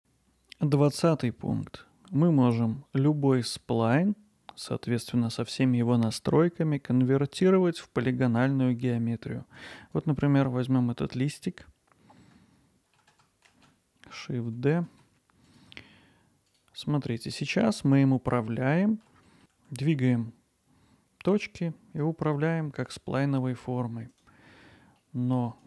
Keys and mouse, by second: 10.1-10.5 drag, 10.5-11.0 middle drag, 13.5 shift+d, 14.9 shift+z, 15.5 click, 15.8 middle click, 17.5 middle click, 17.9 alt+middle click, 19.4 Tab, 19.5 g, 25.3 middle click.